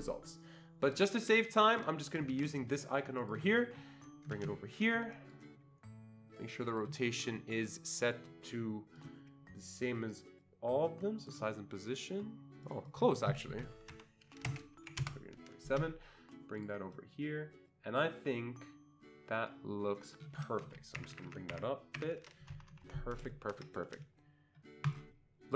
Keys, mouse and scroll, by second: 1.5 click, 2.3 ctrl+c, 3.2 click, 4.4 ctrl+v, 5.6-6.9 drag, 9.0 right click, 12.6 click, 12.9 double click, 13.9 Left, 14.5 BackSpace, 14.8 7, 15.0 Return, 16.6 click, 17.0-21.2 drag, 17.0 Return, 21.0 ctrl+Up, 21.1 ctrl+Up, 21.2 ctrl+Up, 21.5 ctrl+Up, 22.0 ctrl+Up, 22.5 Escape, 22.7 Escape, 22.9 Escape, 24.8 click.